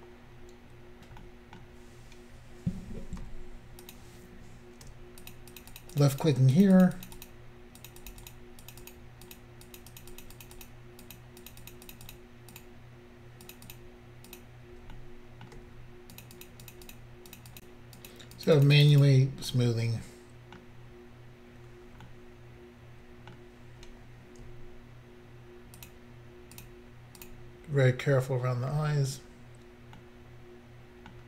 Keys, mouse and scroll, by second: 3.3 f, 3.9 click, 5.2 shift+click, 5.3 shift+click, 5.6 shift+click, 5.6 shift+click, 5.8 shift+click, 5.8 shift+double click, 6.0 shift+click, 6.1 shift+click, 6.2 shift+click, 6.3 shift+double click, 6.6 shift+click, 6.7 shift+click, 6.8 shift+click, 6.9 shift+double click, 7.0 shift+click, 7.1 shift+click, 7.2 shift+click, 7.3 shift+double click, 7.8 shift+click, 7.9 shift+click, 8.0 shift+click, 8.1 shift+double click, 8.3 shift+click, 8.3 shift+click, 8.7 shift+click, 8.8 shift+double click, 8.9 shift+click, 9.0 shift+click, 9.3 shift+click, 9.4 shift+double click, 9.7 shift+click, 9.8 shift+click, 9.9 shift+click, 10.0 shift+double click, 10.1 shift+click, 10.3 shift+click, 10.4 shift+click, 10.5 shift+double click, 10.6 shift+click, 10.7 shift+click, 11.1 shift+click, 11.2 shift+double click, 11.5 shift+click, 11.5 shift+click, 11.6 shift+click, 11.8 shift+double click, 11.9 shift+click, 12.0 shift+click, 12.1 shift+click, 12.2 shift+double click, 12.6 shift+click, 12.6 shift+click, 13.5 shift+click, 13.6 shift+click, 13.7 shift+click, 13.8 shift+click, 14.3 shift+click, 15.0 middle click, 16.2 shift+click, 16.4 shift+click, 16.7 shift+click, 16.9 shift+click, 17.3 shift+click, 17.4 shift+click, 17.5 shift+click, 17.6 shift+double click, 18.0 shift+click, 18.1 shift+click, 18.4 shift+click, 18.5 shift+double click, 18.6 shift+click, 18.7 shift+click, 18.8 shift+click, 18.9 shift+double click, 18.9 shift+click, 19.0 shift+click, 19.5 middle click, 25.8 shift+click, 26.6 shift+click, 27.2 shift+click, 29.2-29.9 scroll down 1, 29.9 middle click.